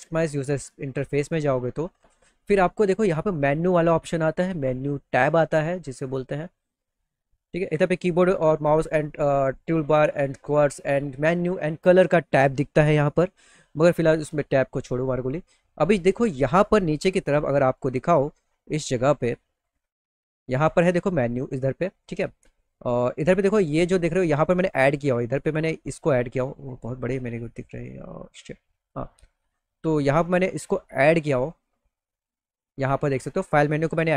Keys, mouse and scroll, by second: 2.4 click, 19.1 click, 20.3 click, 24.7 click, 28.4 click, 30.6 click, 31.9 click.